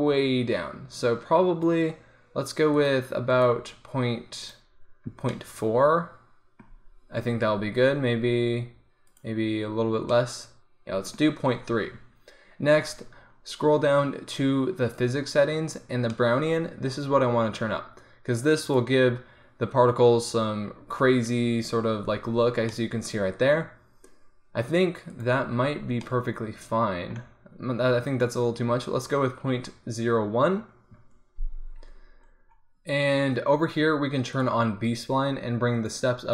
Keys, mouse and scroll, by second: 5.4-6.5 middle drag, 8.3 middle click, 9.1-10.2 drag, 10.2-16.2 middle drag, 18.7-22.8 drag, 25.2 click, 26.1-28.1 middle drag, 28.1-34.4 drag, 34.4 middle click, 34.9-36.3 drag.